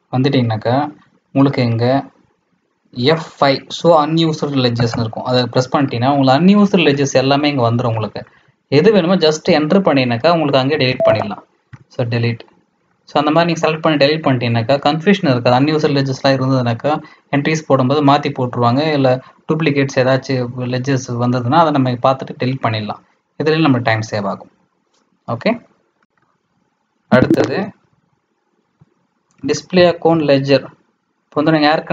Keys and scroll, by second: 26.1 Page_Down, 27.1 Escape, 28.0 Escape, 29.1-30.6 typing, 31.4 Down, 31.7 Down.